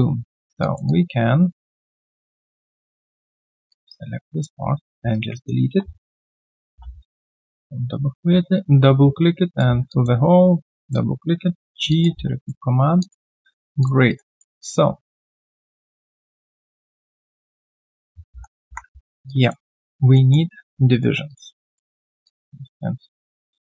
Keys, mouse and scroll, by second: 0.8 alt+double click, 2.2 alt+middle click, 3.7 alt+click, 6.3 right click, 6.7 q, 7.4 double click, 7.8 shift+right click, 9.9 alt+click, 10.8 double click, 11.6 g, 11.9 alt+click, 12.2 right click, 12.7 scroll down 2, 13.0 alt+click, 13.5 alt+right click, 14.1 alt+right click, 14.3 alt+click, 15.1 alt+click, 18.1-18.6 alt+scroll down 2, 18.4-19.1 typing, 19.0 alt+right click, 19.3 alt+click, 19.7 alt+right click, 20.1 alt+middle click, 20.5 right click, 21.7 shift+click, 21.8 shift+double click, 22.2 alt+click.